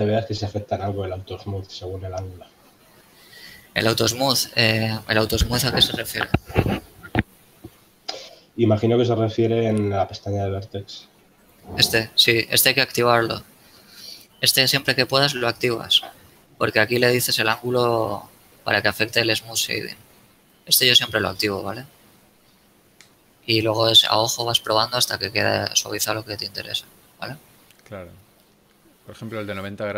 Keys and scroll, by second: 13.8 Tab.